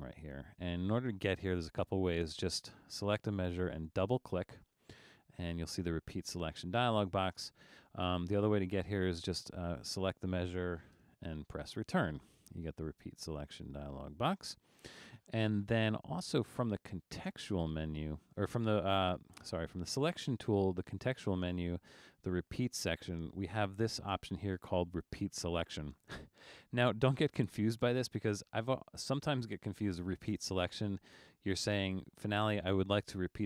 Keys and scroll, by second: 10.9 Return.